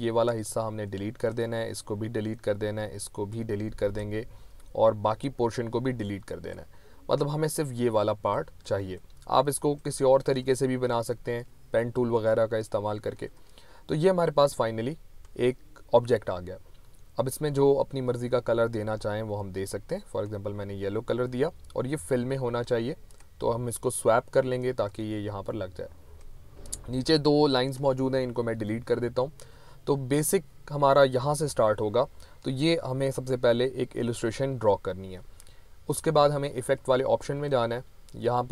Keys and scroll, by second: 28.4 Delete.